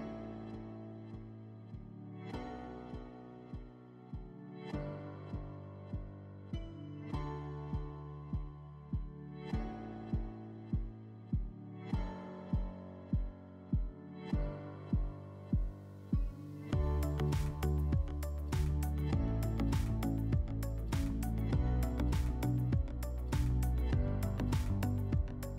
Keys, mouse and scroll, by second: 5.9 middle click, 20.1 click, 21.1 click, 23.0 click, 25.0 click.